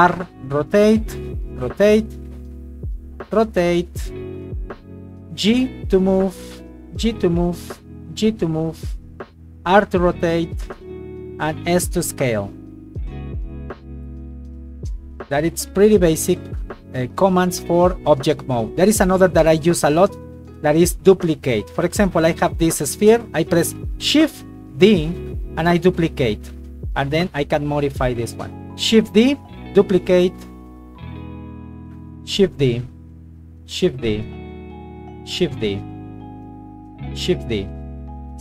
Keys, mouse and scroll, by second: 2.1 Escape, 2.5 right click, 3.2 r, 4.5 click, 5.2 right click, 5.9 g, 6.7 click, 7.4 right click, 8.0 g, 8.4 click, 9.6 r, 11.5 s, 21.4 right click, 22.6 g, 23.0 click, 24.8 shift+d, 25.9 click, 26.3 s, 27.2 click, 27.5 g, 28.0 click, 28.3 right click, 29.1 shift+d, 29.7 click, 30.0 s, 30.5 click, 30.7 g, 31.1 click, 31.8 right click, 32.3 shift+d, 32.7 click, 33.7 shift+d, 34.1 click, 34.8 right click, 35.6 click, 36.6 right click, 37.3 shift+d, 37.7 click.